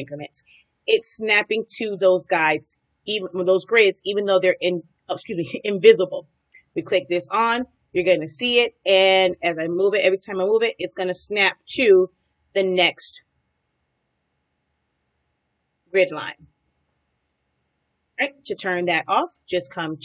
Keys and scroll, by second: 9.5 Right, 13.6 Down, 15.5 Down, 16.7 Right.